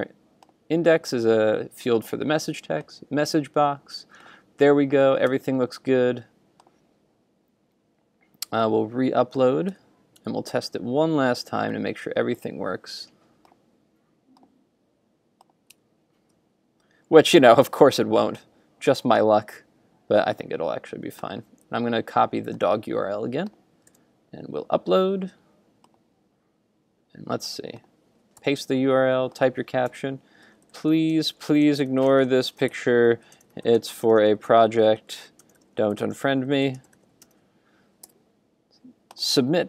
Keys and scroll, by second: 5.1 super+s, 5.4 super+Tab, 9.7 super+Tab, 15.8 super+Tab, 23.9 super+r, 28.4 super+v.